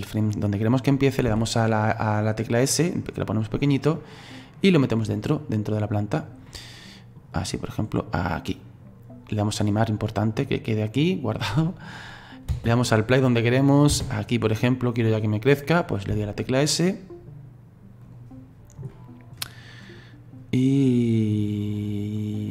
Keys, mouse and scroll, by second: 4.0-6.5 drag, 6.5-7.8 middle drag, 7.8-9.5 drag, 10.4-12.5 drag, 12.5 space, 13.9 space, 16.1 s, 18.9-20.0 middle drag, 20.0-22.5 drag.